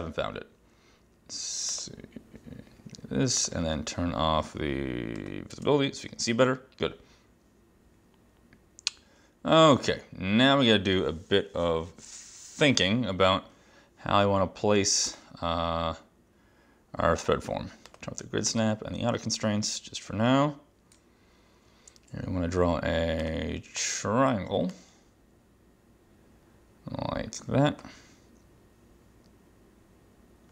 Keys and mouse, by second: 1.8 click, 3.4 click, 5.2 click, 5.6 space, 15.2 click, 18.0 click, 18.6 click, 23.3 click, 24.8 click.